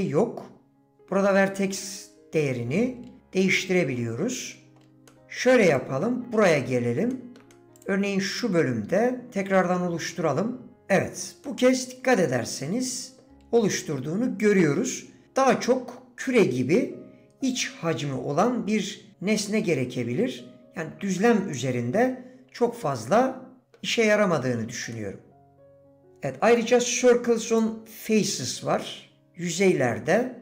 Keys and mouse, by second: 3.4 middle click, 5.1 shift+Tab, 5.1 middle click, 6.7 Tab, 7.1 click, 7.5 click, 7.8 click, 11.4 click, 11.7 middle click, 11.8 right click, 12.0 middle click, 12.0 right click, 12.4 middle click, 23.6 middle click, 24.9-26.1 middle drag, 26.1 d.